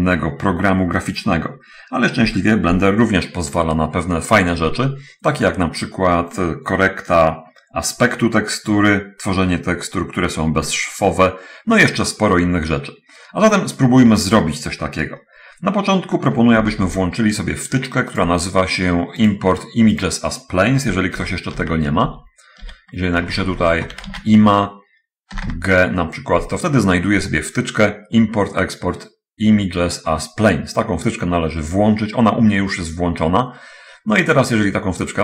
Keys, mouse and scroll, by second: 17.1 ctrl+alt+u, 18.6 click, 19.4 shift+click, 20.4 shift+click, 21.5-25.5 typing.